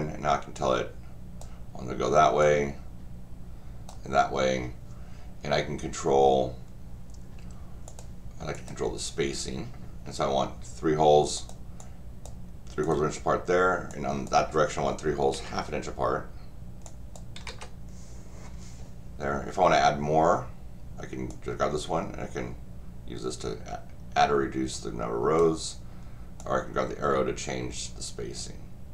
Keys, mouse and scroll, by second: 0.5 click, 2.4-3.9 drag, 7.8 click, 8.5 click, 11.3 click, 11.8 click, 12.8 click, 13.9 click, 16.8 click, 21.3-25.4 drag, 26.4-28.9 drag.